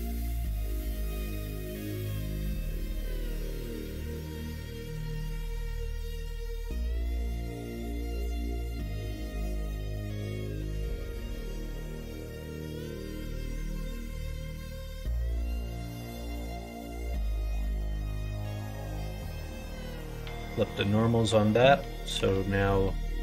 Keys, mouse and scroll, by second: 1.1 3, 1.8 alt+click, 3.9 3, 4.3 shift+click, 7.8 middle click, 8.7 shift+middle click, 9.6 shift+d, 11.2 s, 13.1-14.1 middle drag, 15.1 s, 16.6 middle click, 18.6 shift+n, 20.8 middle click, 22.0 KP_1.